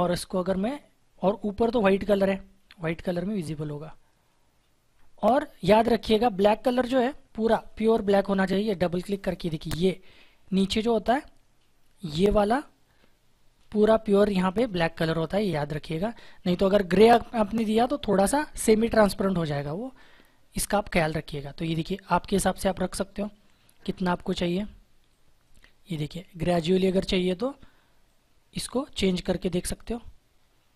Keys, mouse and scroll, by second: 0.4 click, 7.5-11.9 drag, 15.3 click, 19.9 click.